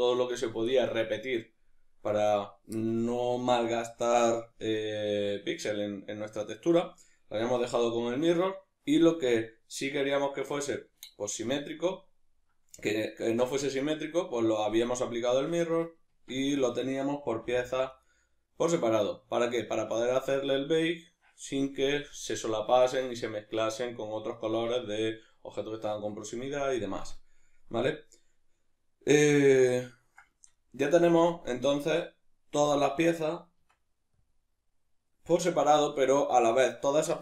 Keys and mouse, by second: 12.8-16.5 ctrl+middle drag, 16.1 Tab, 16.5 right click, 17.4 g, 18.0 right click, 27.4-37.2 middle drag, 32.6 a, 33.6 Tab.